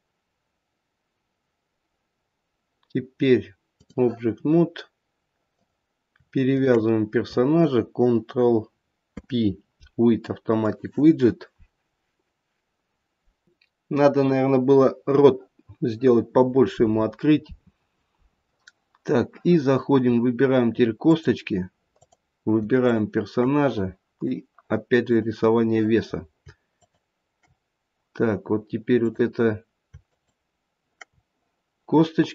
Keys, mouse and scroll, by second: 5.5 click, 6.5 shift+click, 9.0 ctrl+p, 21.0 click, 21.9 click, 22.8 shift+click, 23.3 shift+click, 24.2 click, 26.7 shift+click, 29.0 click, 30.0 shift+click.